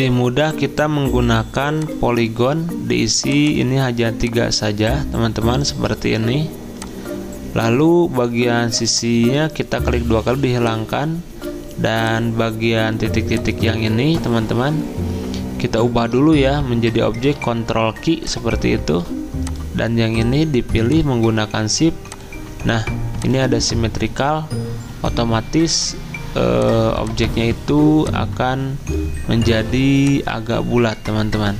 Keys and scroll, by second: 17.4 ctrl+q.